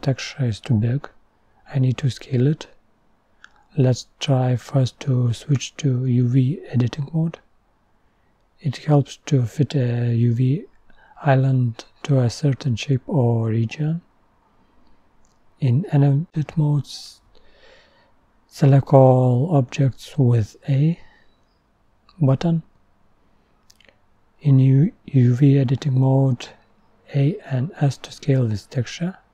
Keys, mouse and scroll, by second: 3.7 click, 6.8-10.7 drag, 10.7 scroll up 4, 11.9 click, 16.3-19.5 drag, 19.5-20.0 scroll up 1.